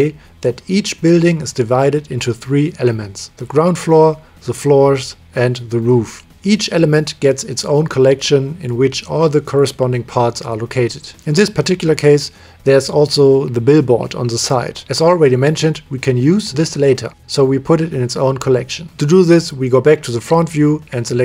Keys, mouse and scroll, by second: 1.0 middle click, 10.9-12.1 middle drag, 14.6 click, 14.8-17.3 middle drag, 17.3 KP_1, 20.5-21.2 drag.